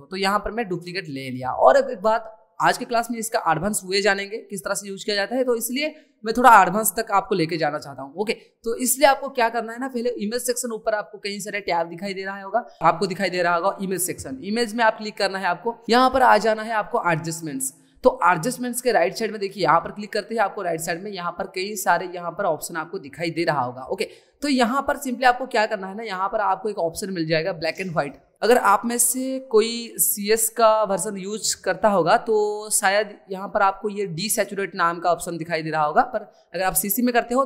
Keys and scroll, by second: 16.7 ctrl+i.